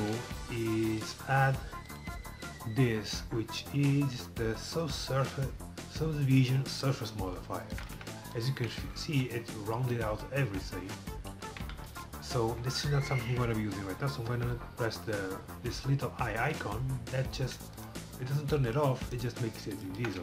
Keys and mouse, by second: 0.2 g, 1.9-4.0 drag, 7.2 middle click, 8.0 Tab, 9.1 z, 10.6 Tab, 11.3 KP_7, 11.9 z, 16.6-17.8 drag, 17.8 middle click, 18.2 g, 19.3 g.